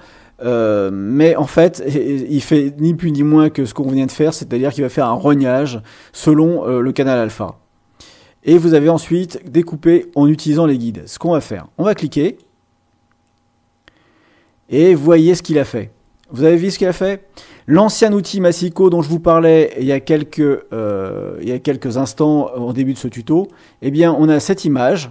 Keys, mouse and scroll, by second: 12.2 click, 18.1-19.8 drag, 23.4 click.